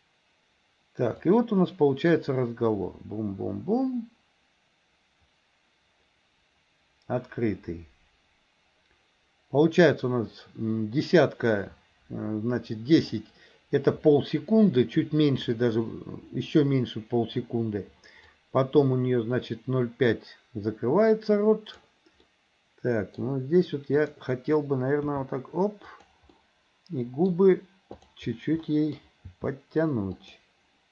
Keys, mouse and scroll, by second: 1.4-13.2 drag, 18.4-22.0 drag, 22.3 middle click, 25.2 g, 26.4 middle click, 28.7-29.0 middle drag, 29.4 g.